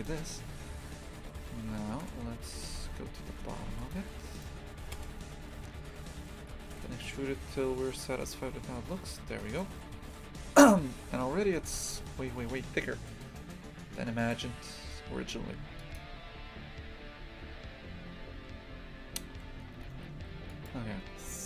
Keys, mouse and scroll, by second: 2.0 KP_0, 2.4 Tab, 2.7 shift+f, 4.0 3, 4.4 right click, 5.0 KP_0, 6.5 g, 14.3 click, 15.9 click.